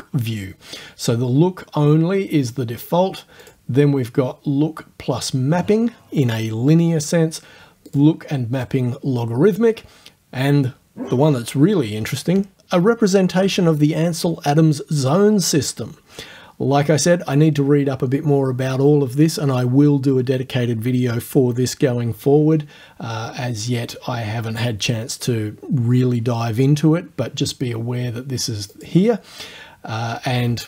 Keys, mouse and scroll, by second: 3.4 click, 7.9 click, 28.8 click.